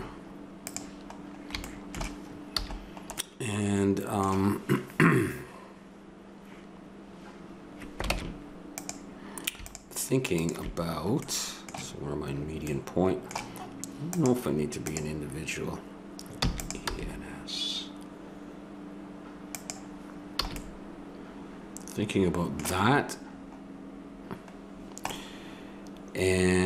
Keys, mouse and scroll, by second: 2.5 a, 8.1 ctrl+Tab, 9.6-11.0 right drag, 11.0-12.7 middle drag, 14.1 click, 16.4 e, 16.8 s, 20.6 a, 22.2 middle click, 25.3-26.6 middle drag.